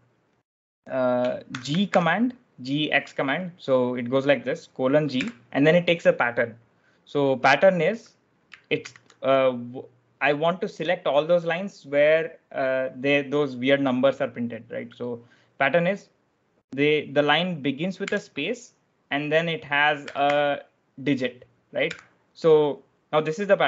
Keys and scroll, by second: 1.5 shift+;, 1.8 g, 8.1 /, 8.7 shift+6, 18.0 space, 19.7-20.6 typing, 21.8 /.